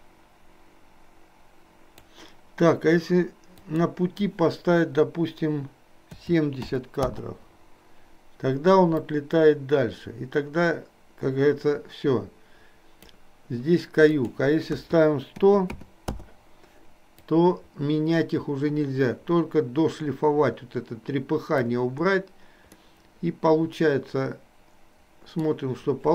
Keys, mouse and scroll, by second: 3.5-7.1 drag, 9.1-13.3 drag, 14.0-16.1 drag, 15.6 KP_0, 17.4-21.8 drag, 22.9-25.5 middle drag.